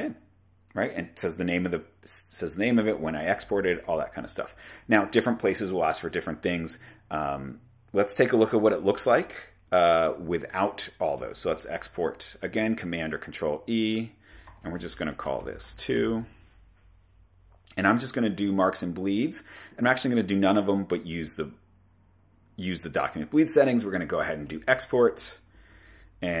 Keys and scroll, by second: 8.5 super+Tab, 11.5 super+e, 14.6 Right, 15.4-16.0 typing, 25.6 super+Tab.